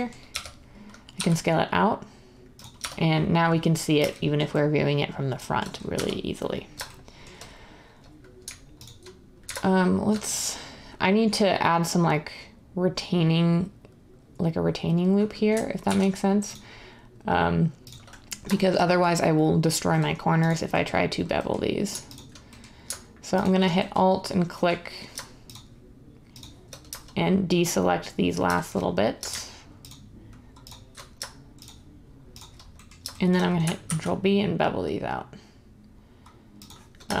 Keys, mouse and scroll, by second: 0.0-1.1 typing, 2.9 Tab, 5.9 Tab, 15.8 ctrl+r, 33.8 ctrl+b.